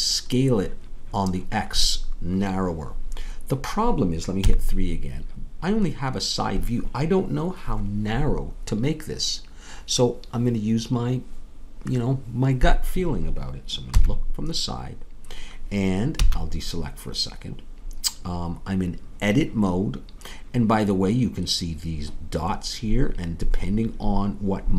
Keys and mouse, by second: 4.4 KP_3, 13.9 KP_1, 16.1 a.